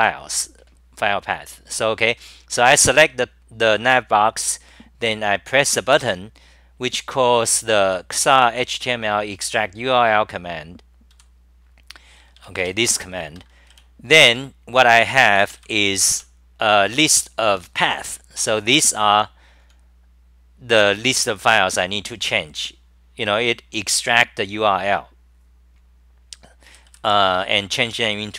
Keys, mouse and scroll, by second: 9.9 scroll up 10, 9.9 typing, 10.5-10.9 scroll, 13.8 typing, 14.3 ctrl+g, 16.2 k, 18.1 super+=, 19.6 s, 26.6 d, 26.8 d.